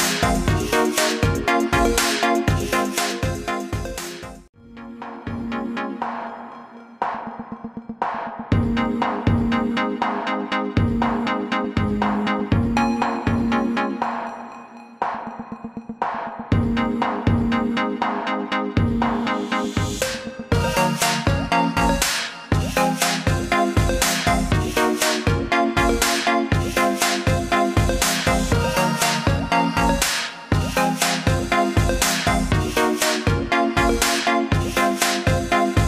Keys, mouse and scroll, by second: 3.2 click, 6.9 click, 12.6 click, 16.2 click, 16.7 scroll up 1, 17.3 click, 20.4 BackSpace, 21.0 click, 21.6 BackSpace, 24.8 scroll down 1, 28.6-29.4 scroll up 1, 29.8 scroll up 1, 30.2 scroll down 1, 31.2 scroll down 1, 32.7 alt+scroll up 1, 33.3 alt+scroll up 1, 35.5 click.